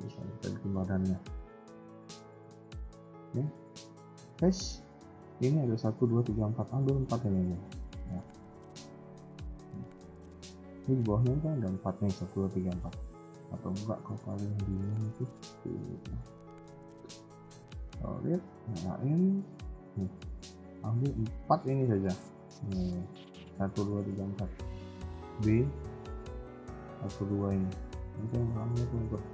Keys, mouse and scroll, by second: 0.1 KP_1, 2.0 middle click, 4.0 click, 4.5 middle click, 6.6 c, 8.1 KP_1, 8.3-8.7 scroll down 3, 8.7 shift+middle click, 9.0 scroll up 2, 9.3 middle click, 9.8 scroll up 2, 10.3 middle click, 10.9 scroll up 1, 11.2 middle click, 12.6 KP_1, 13.0 scroll down 2, 13.3 shift+middle click, 13.8 z, 14.5 scroll up 2, 14.9 a, 15.0 a, 17.5 z, 18.6 click, 20.4 b, 21.7-22.0 scroll down 3, 22.0 middle click, 24.1 KP_1, 24.4-24.7 scroll up 3, 24.6 a, 24.7 a, 25.0 b, 28.1 middle click, 28.9 KP_1, 29.0-29.3 scroll down 4.